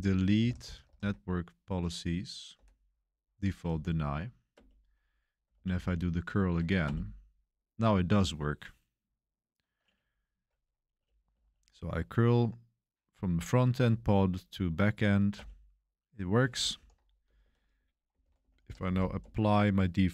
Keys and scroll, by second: 0.0-1.3 typing, 2.5 Tab, 4.5 Return, 5.5 Page_Up, 5.7 Page_Up, 6.8 Return, 11.3 Page_Up, 15.3 Return, 16.7 ctrl+k, 17.2-19.3 typing.